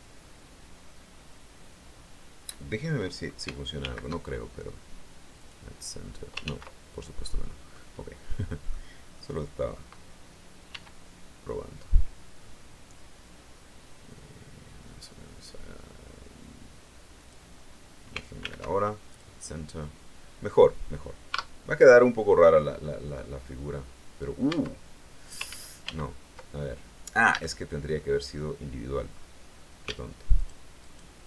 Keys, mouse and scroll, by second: 3.7 alt+m, 5.3 click, 6.3 ctrl+z, 7.1 middle click, 7.9 middle click, 9.1 middle click, 10.6 e, 17.1 click, 18.3 alt+m, 19.0 click, 21.2 Tab, 21.9-24.3 middle drag, 24.4 Tab, 25.4 ctrl+z, 27.2 a, 27.9 click, 29.0-29.3 scroll up 1, 30.3 alt+shift+right click, 30.7 alt+shift+right click, 31.1 alt+shift+right click.